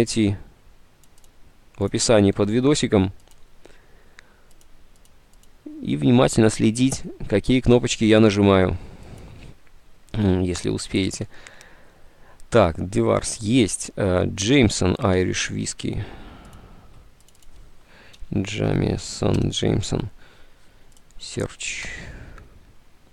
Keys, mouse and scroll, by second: 15.9 alt+Tab, 18.1-19.2 typing, 19.3 Down, 19.5 Return.